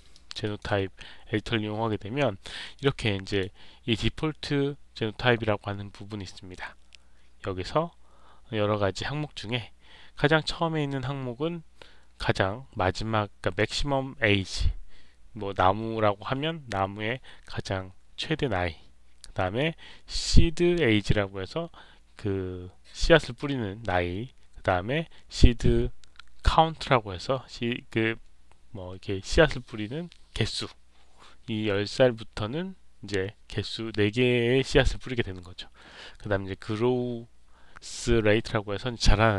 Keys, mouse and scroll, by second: 0.0 alt+click, 0.4 alt+right click, 2.7 click, 3.2 click.